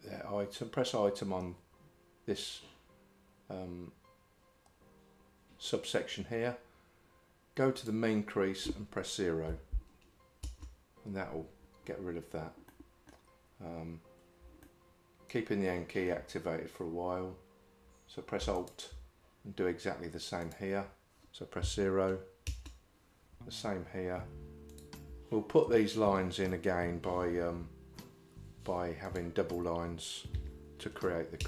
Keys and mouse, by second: 7.9-10.5 drag, 12.7 middle click, 14.7-16.1 shift+middle drag, 20.6-22.5 drag, 29.1-31.4 drag.